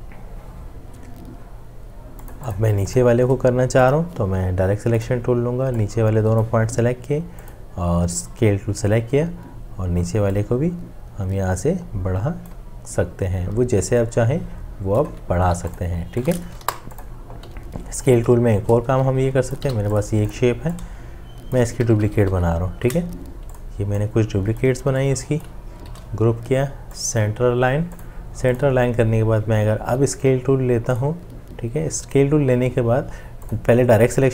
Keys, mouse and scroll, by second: 15.5 v, 16.6 Delete, 17.4 Delete, 18.3 m, 18.4 shift+click, 19.6 v, 21.0-23.2 drag, 21.8 ctrl+d, 25.9 ctrl+g.